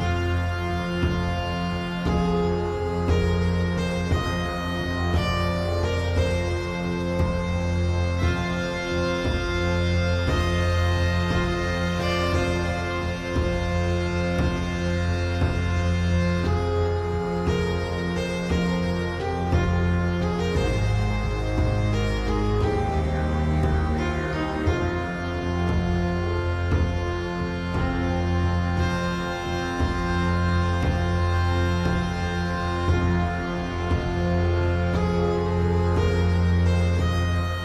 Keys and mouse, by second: 0.9-1.9 middle drag, 4.5-5.6 shift+drag, 7.0-8.7 shift+drag, 11.4 shift+click, 13.8 shift+middle click, 16.2-17.9 shift+drag, 19.0-20.4 shift+drag, 21.7-23.7 middle drag, 23.7 shift+middle click, 26.2-27.9 shift+drag, 30.0 shift+click, 31.9 middle click, 34.6-36.5 shift+drag.